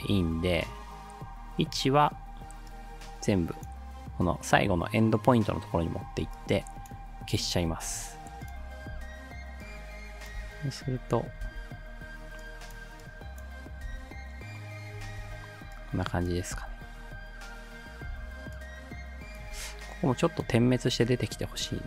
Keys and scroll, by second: 7.9 u, 10.4 space, 11.5 space, 13.9 space, 15.2 space, 16.6 space, 18.1 space.